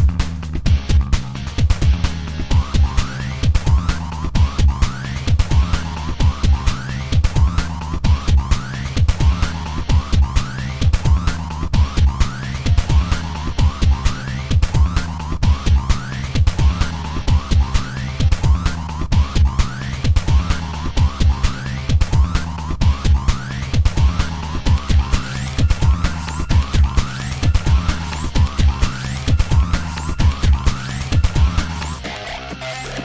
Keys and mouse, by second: 0.0-19.2 typing, 9.2 ctrl+z, 13.2 ctrl+z, 16.2 ctrl+z, 16.4 ctrl+z, 17.2 ctrl+z, 20.4 r, 20.7 r, 20.7 a, 21.9-24.4 typing, 22.5 ctrl+z, 22.6 ctrl+z, 25.7 middle click, 25.9-29.4 typing, 30.4-33.0 typing.